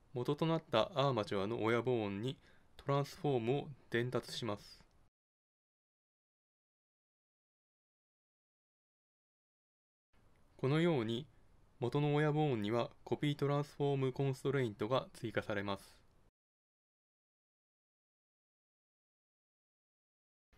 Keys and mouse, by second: 3.8 g, 5.3-7.3 drag, 7.0 right click, 7.4-9.1 middle drag, 9.5-11.9 drag, 12.9-15.6 drag, 19.7 ctrl+n.